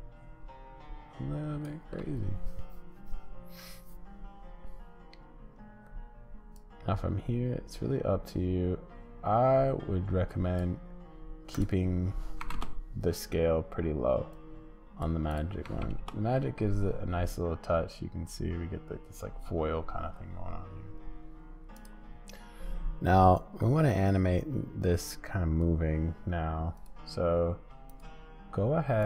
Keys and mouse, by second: 11.6-15.1 drag, 15.4-16.5 drag, 21.7-29.0 drag.